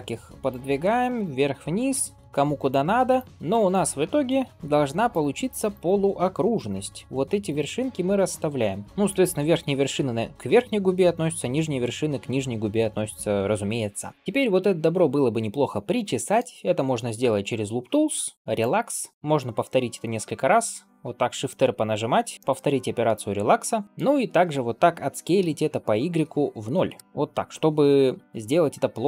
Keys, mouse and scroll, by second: 0.9 click, 1.3 middle click, 1.8 g, 3.0 click, 3.3 g, 3.5 click, 4.2 g, 5.6 click, 6.3 g, 8.0 click, 8.7 g, 12.5 scroll down 1, 12.8 shift+middle click, 14.1 alt+click, 14.3-16.2 middle drag, 17.9 right click, 19.1 middle click, 20.5 shift+r, 20.9 shift+r, 21.6 shift+r, 22.3-23.8 middle drag, 23.8-24.2 scroll down 1, 25.2 s, 27.8 middle click, 28.2-29.0 shift+middle drag.